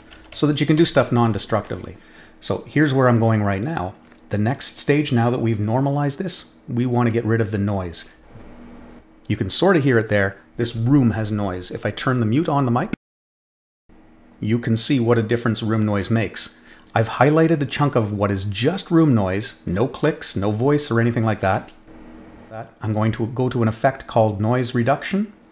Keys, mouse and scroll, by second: 0.0-0.8 typing, 7.7-8.3 drag, 16.8 click, 17.6-19.6 drag, 22.8 click, 24.4 click.